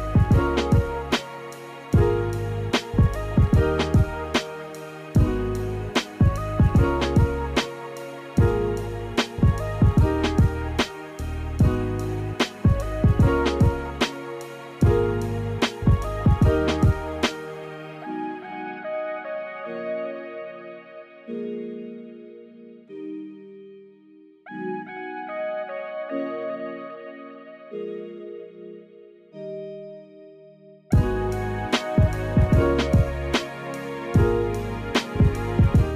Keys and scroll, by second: 3.1 space, 3.8 space, 28.6 space, 34.9 space, 35.8 space.